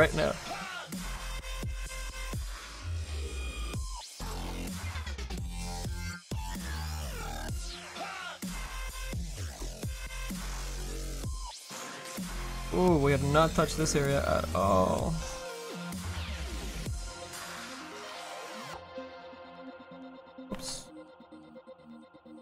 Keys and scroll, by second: 20.3 ctrl+z.